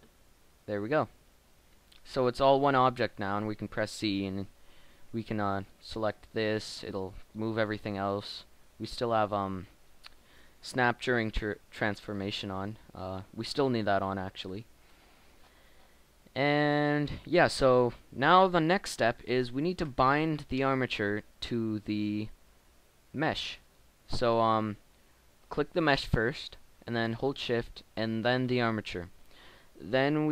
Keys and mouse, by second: 2.5 g, 3.4 z, 7.1 g, 13.9-19.7 middle drag, 19.7 KP_1, 20.8-22.9 middle drag, 23.5-26.8 right drag, 29.3-30.3 right drag.